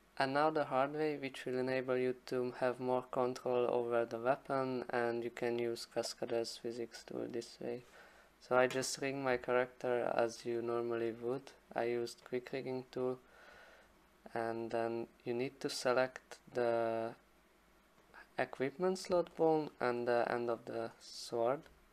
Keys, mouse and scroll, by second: 11.0 alt+click, 11.5 alt+click, 11.5 alt+click, 18.1 click, 20.0 alt+click, 20.3 alt+click.